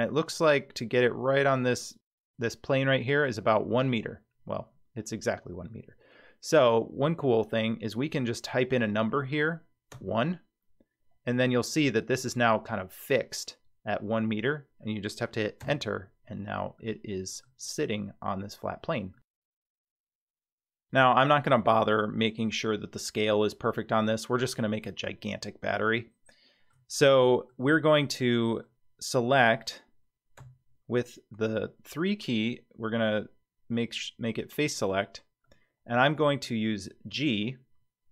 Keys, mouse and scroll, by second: 16.8 middle click, 19.1-20.3 middle drag, 20.7-21.5 scroll down 2, 21.5-22.2 scroll up 4, 25.7-26.7 shift+middle drag, 27.1 middle click, 27.7 scroll down 2, 28.2 middle click, 30.4 3, 34.7 click, 35.4-36.4 middle drag, 36.5-37.1 scroll down 3, 37.1 g.